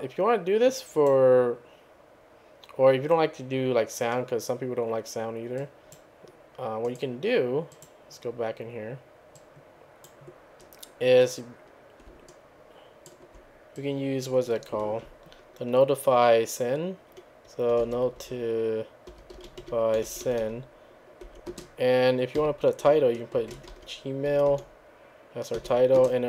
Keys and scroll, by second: 17.5-21.2 typing, 22.4-25.6 typing.